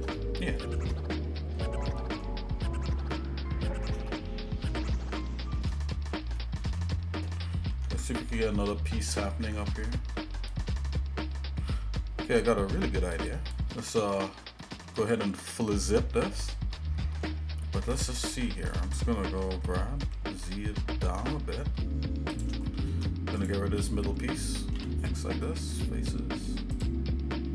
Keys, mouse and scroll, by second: 0.2 shift+middle click, 1.4 scroll down 1, 1.9 middle click, 3.1 shift+middle click, 4.1 middle click, 5.1 shift+middle click, 5.8 middle click, 6.4 shift+middle click, 7.7 ctrl+Tab, 8.9 shift+middle click, 13.7 shift+middle click, 14.6 shift+middle click, 16.5 shift+middle click, 17.9 shift+middle click, 19.5 g, 22.6 shift+middle click, 23.4 click, 24.7 x.